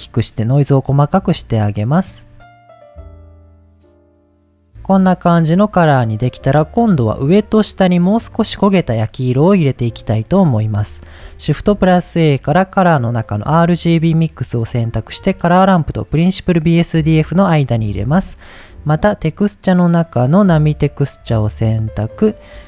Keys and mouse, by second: 1.2 middle click, 2.0 middle click, 2.6 click, 2.7 drag, 4.4 click, 4.6-5.2 middle drag, 6.6 middle click, 9.6 middle drag, 10.6 middle click, 11.4 shift+a, 17.4 middle click, 18.0 shift+a.